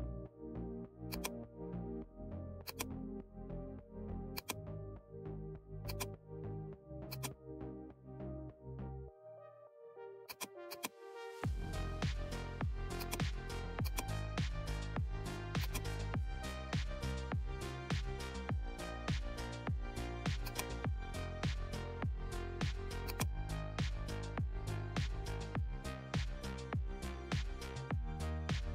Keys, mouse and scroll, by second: 1.1 click, 2.6 click, 4.3 click, 5.8 click, 9.2 click, 9.2 right click, 10.2 click, 11.9 right click, 12.9-17.8 drag, 17.8-18.2 scroll down 2, 20.4-23.0 drag, 23.0-25.9 drag, 26.0 Return.